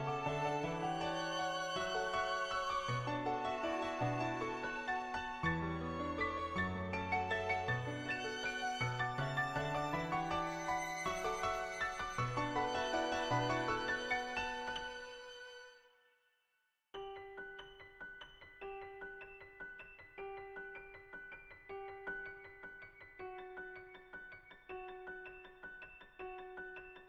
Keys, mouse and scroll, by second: 1.2 click, 5.0 [, 5.1 click, 5.8 [, 6.3 click, 6.7 click, 6.8 click, 7.0 click, 8.0 ctrl+z, 8.1 [, 8.3 [, 8.6 click, 8.9 [, 9.0 [, 9.2 click, 10.1 [, 10.3 click, 10.8 click, 11.6 ], 12.9 click, 13.2 [, 13.8 click, 14.6 click, 16.2 click, 24.8 click, 25.5 click, 26.2 ctrl+z, 26.3 ctrl+z, 26.8 ctrl+z.